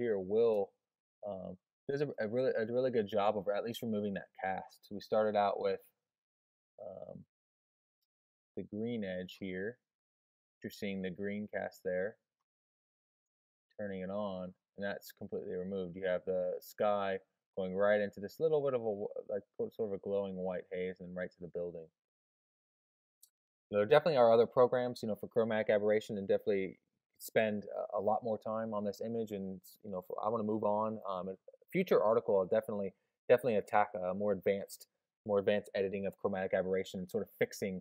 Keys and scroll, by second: 0.5 super+space.